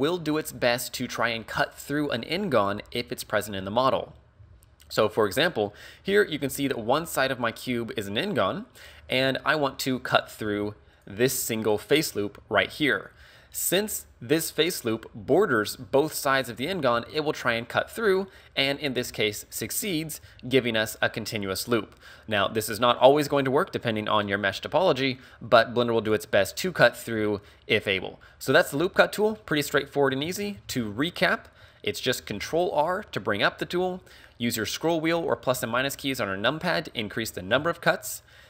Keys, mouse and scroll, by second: 4.5 ctrl+z, 9.2 ctrl+Tab, 10.5 ctrl+Tab, 11.5 alt+right click, 16.9 ctrl+r, 19.6 click, 20.3 a, 28.3 middle click, 30.3 ctrl+z, 30.7 ctrl+z, 32.3 ctrl+r.